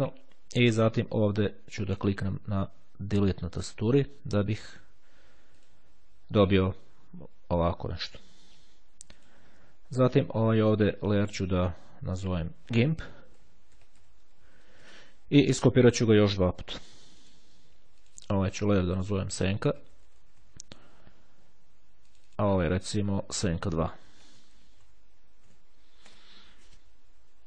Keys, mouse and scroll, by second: 3.1 Delete, 5.7 click, 9.2 click, 10.4 click, 12.3 click, 13.7-15.1 typing, 17.0-18.0 drag, 18.2 click, 19.5-21.1 typing, 22.2 click, 24.0-25.5 typing.